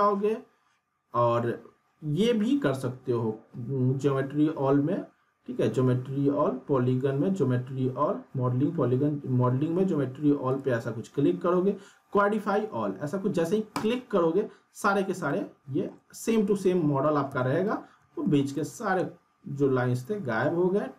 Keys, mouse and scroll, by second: 10.5 click, 13.7 click, 15.3-15.9 alt+middle click, 16.4 w, 16.6 w, 17.3 z, 18.4 scroll up 2, 18.6-20.9 alt+middle drag.